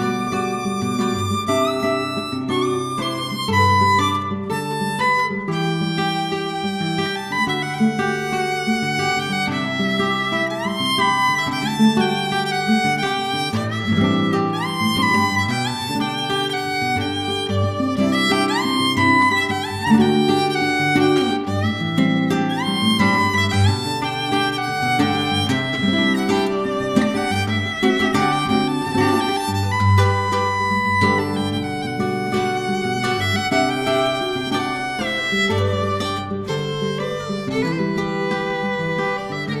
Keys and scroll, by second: 0.0 Return, 0.3 1, 0.4 Return, 1.5 ctrl+c, 1.6 ctrl+v, 1.8 space, 2.1 BackSpace, 2.2 5, 2.3 Return, 3.5 Delete, 5.3 Delete, 5.5-7.9 typing, 5.7 Return, 8.0 Return, 9.4 5, 9.5 Return, 11.0-14.0 typing, 12.9 Return, 14.1 Return, 16.3 Home, 16.3 -, 16.5 Return, 19.3 Return, 23.9 ctrl+c, 24.4 ctrl+c, 24.4 ctrl+v, 24.5 ctrl+c, 24.6 ctrl+v, 24.6 ctrl+c, 24.7 ctrl+v, 24.8 ctrl+c, 24.9 ctrl+v, 24.9 ctrl+c, 25.0 ctrl+v, 25.1 ctrl+c, 25.2 ctrl+v, 27.3 shift+g, 27.5 Return, 28.8-29.7 typing, 29.8 Delete, 31.4 ctrl+c, 31.9-32.7 typing.